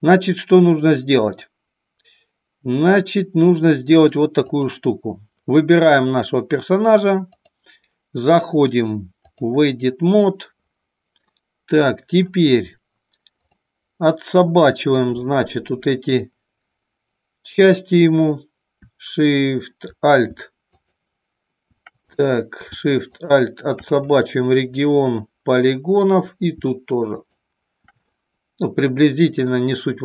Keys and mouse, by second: 4.2 click, 7.2-9.5 drag, 11.1 middle click, 14.4 middle click, 15.3 shift+middle click, 20.6 shift+click, 22.1 click, 23.0 shift+click, 24.0-25.9 middle drag, 27.1 shift+click, 28.0-29.4 middle drag.